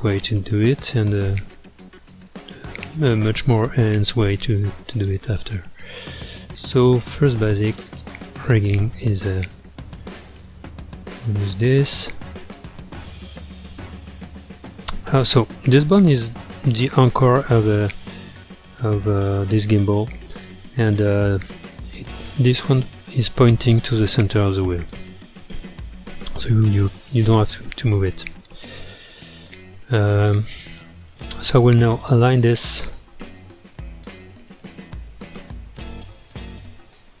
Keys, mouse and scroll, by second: 2.7-3.9 scroll up 4, 3.9-6.9 middle drag, 6.9 click, 8.4-12.4 middle drag, 12.4 click, 13.7-15.7 middle drag, 15.7 g, 17.5-20.6 middle drag, 20.7-23.3 middle drag, 23.3 click, 24.5-26.7 middle drag, 26.7 g, 28.1-31.0 middle drag, 31.0 ctrl+Tab, 31.5 click, 32.8-33.6 middle drag, 33.6 g, 34.8-37.2 middle drag.